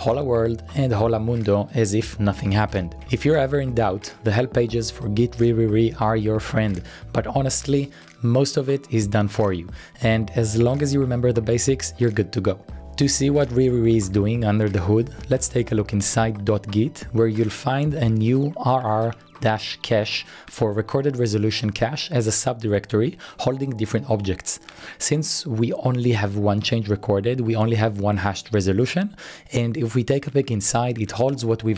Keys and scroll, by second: 1.4-4.6 typing, 4.5 Return, 7.0 typing, 8.7-10.5 typing, 12.5-16.4 typing.